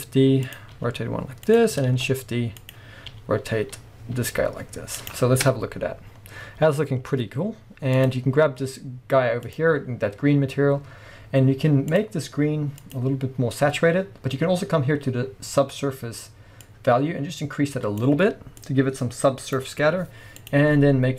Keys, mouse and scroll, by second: 0.6 click, 0.7 r, 1.6 click, 1.9 shift+d, 2.8 click, 3.1 r, 3.8-4.1 scroll down 1, 4.1 r, 5.1 click, 5.5 KP_0, 6.2 scroll up 1, 8.0 click, 9.5 click, 11.9 click, 16.7-20.6 drag.